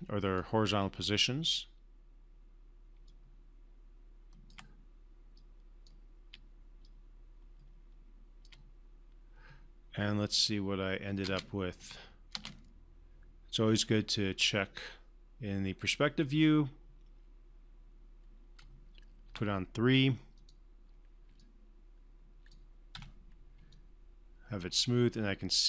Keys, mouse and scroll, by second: 3.0-4.6 typing, 3.1-3.7 click, 5.3-6.0 click, 6.3-8.7 typing, 6.9 click, 10.3 click, 10.3 click, 11.2 space, 13.7-18.7 alt+drag, 19.2 3, 20.3 click, 21.4-22.6 alt+drag, 22.9 3, 23.7-25.6 alt+drag.